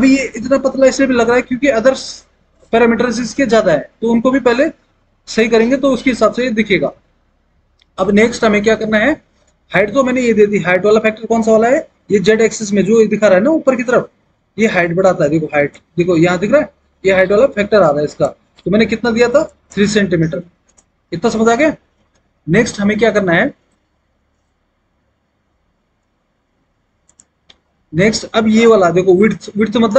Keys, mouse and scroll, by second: 10.5-10.9 scroll, 20.5 KP_3, 20.8 Return.